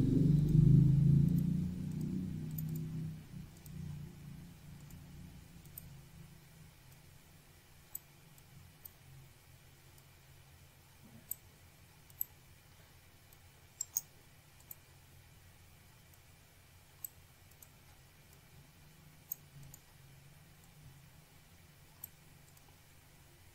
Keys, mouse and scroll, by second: 2.6 click, 3.9 click, 4.8 click, 5.4 click, 5.9 click, 6.1 double click, 6.9 double click, 8.1 click, 8.9 click, 10.1 click, 11.6 click, 13.0 click, 15.0 click, 15.5 scroll down 1, 16.2 click, 17.5 click, 18.9 click, 20.2 click, 21.0 click, 22.3 click.